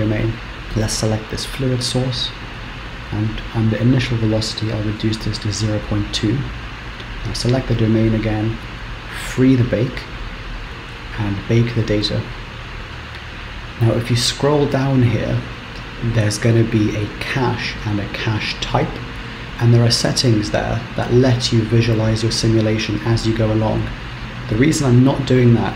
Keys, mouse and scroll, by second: 0.0 click, 2.8-3.6 scroll down 2, 3.6 click, 6.6 click, 9.0 click, 10.7 scroll up 10, 10.9 click.